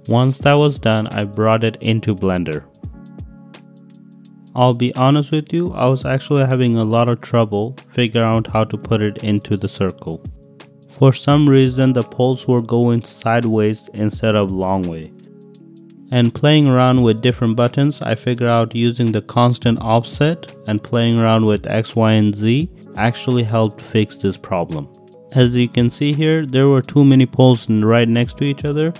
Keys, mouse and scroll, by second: 0.0 click, 0.2 drag, 0.8 s, 1.9 ., 2.0 Return, 2.0 5, 2.3 g, 2.7 z, 3.0 click, 3.3 click, 5.0 click, 6.9 middle click, 7.9 click, 8.1 click, 8.5 click, 9.3 click, 9.9 click, 10.1 click, 10.3 click, 10.5 click, 11.2 click, 11.4 click, 12.0 click, 13.2 click, 14.5 click, 15.2 click, 15.7 click, 17.6 click, 17.7 click, 18.0 click, 19.5 middle click, 19.9 shift+click, 20.4 click, 21.5-22.1 middle drag, 22.1 click, 22.3 middle click, 22.8 middle click, 23.7 middle click, 24.1 middle click, 24.5 middle click, 25.5 middle click, 26.0 click, 26.8 click, 27.3 click, 27.8 click, 27.9 click, 28.8 click.